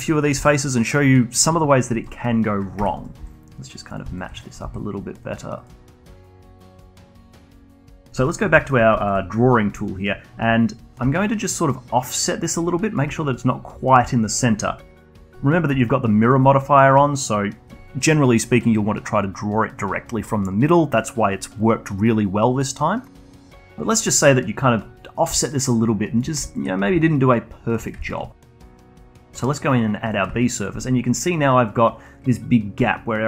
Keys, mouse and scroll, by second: 0.4 Delete, 1.9 alt+click, 2.3-2.8 scroll up 1, 2.8 1, 3.0 click, 3.2 g, 4.1 alt+click, 4.6 g, 5.6 click, 5.8 g, 6.8-7.8 alt+drag, 7.8 alt+middle click, 8.3 alt+click, 8.6 alt+middle click, 9.0-11.0 alt+drag, 11.0 d, 11.6-13.0 drag, 13.0 d, 13.7 d, 14.1 alt+middle click, 15.0-19.4 alt+drag, 23.4 middle click, 23.7-25.7 alt+drag, 25.7 d, 25.8-27.3 drag, 27.3 d, 27.5 click, 28.1 d, 28.4-29.0 alt+drag, 29.2 alt+click, 29.6-30.8 shift+right drag, 30.8-33.2 alt+drag.